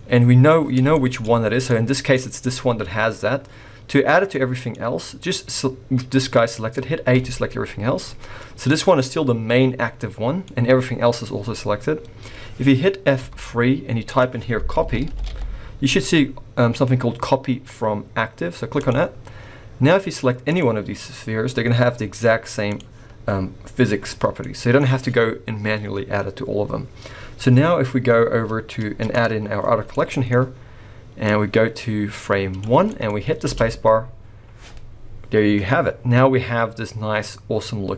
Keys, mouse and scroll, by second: 0.0-0.9 scroll up 6, 0.9 shift+middle click, 1.7 middle click, 3.3-4.3 scroll down 4, 4.3 middle click, 4.7-7.1 scroll up 1, 7.1 scroll up 1, 7.1 a, 7.9 middle click, 8.7-10.2 scroll up 2, 10.2 scroll up 1, 10.3 scroll down 2, 10.5 middle click, 10.7 middle click, 13.2 F3, 19.4-20.4 scroll down 1, 20.4 click, 22.6 click, 24.4 middle click, 29.1 click, 29.7 scroll down 3, 29.9 middle click, 31.3 click, 32.9 middle click, 33.1 scroll up 2, 33.4 space.